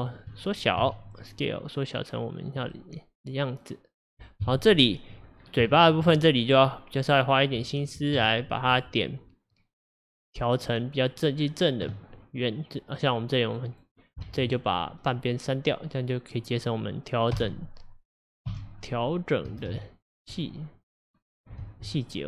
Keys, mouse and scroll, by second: 0.0 shift+middle click, 0.3 shift+scroll up 2, 0.9 s, 2.8-4.0 middle drag, 4.0-4.5 scroll up 1, 4.5 KP_1, 5.5-5.8 scroll up 3, 5.8 shift+middle click, 6.5 click, 8.2 1, 8.8 click, 10.5-10.8 scroll down 3, 11.5-13.6 scroll down 5, 13.6 click, 14.3 alt+z, 14.6 click, 17.4 x, 18.5 x, 19.7 x, 21.0 scroll up 4, 21.7 alt+z.